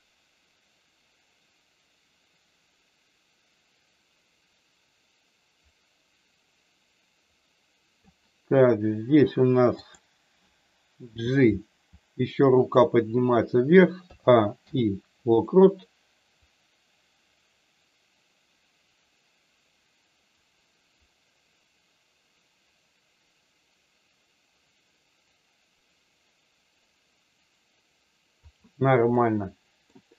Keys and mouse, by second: 9.8 click, 11.0 g, 12.5 click, 14.0 a, 14.5 i, 16.6-28.4 drag, 29.2 middle click.